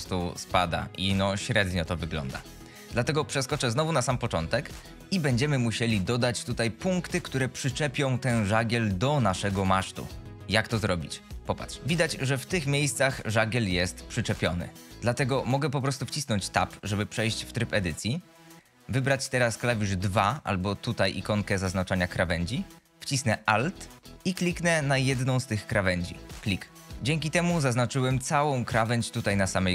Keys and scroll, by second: 20.1 2, 27.0 z.